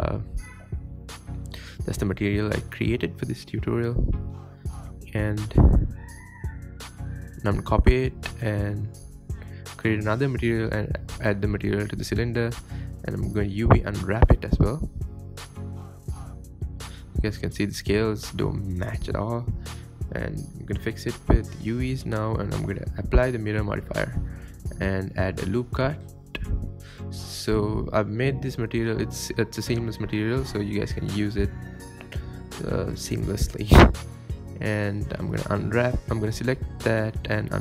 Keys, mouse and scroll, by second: 3.1 click, 5.0-5.3 scroll down 6, 5.4-5.8 scroll up 2, 6.2 space, 6.5 space, 6.7 click, 8.2 click, 9.3 click, 10.3 drag, 11.0 scroll up 3, 11.3 Tab, 11.6 alt+click, 11.9 3, 12.1 alt+click, 12.3-12.7 scroll up 4, 12.5 shift+middle click, 12.8 scroll down 2, 13.4 click, 14.1 Tab, 14.3 ctrl+v, 14.7 click, 15.0 x, 15.2 click, 15.9 scroll down 1, 16.1-16.4 scroll up 2, 16.1 Tab, 16.9 ctrl+KP_Add, 17.3 click, 17.4 Tab, 17.5 scroll down 2, 17.6 scroll up 1, 17.7-19.0 middle drag, 19.0 n, 19.9 n, 20.1 click, 20.1 n, 20.3 n, 20.4 scroll down 3, 20.6 click, 21.5-21.9 middle drag, 21.9-22.5 scroll up 3, 22.1 Tab, 22.5 Tab, 23.0 scroll down 1, 23.1 middle click, 23.7 click, 23.9 Tab, 24.0 middle click, 24.7 alt+click, 25.3-26.4 middle drag, 26.4 ctrl+e, 26.5-28.4 shift+middle drag, 28.4 click, 29.2 u, 29.7 Tab, 30.1 click, 31.1 middle click, 31.2 scroll down 2, 31.3 middle drag, 31.4-32.1 scroll up 5, 31.6 KP_7, 32.3 Tab, 32.5 scroll down 2, 32.6 click, 32.8 scroll up 2, 33.0 shift+click, 33.4 s, 34.4 Tab, 34.9 click, 35.3 l, 36.1 click, 36.3 click, 37.0 click, 37.4 a.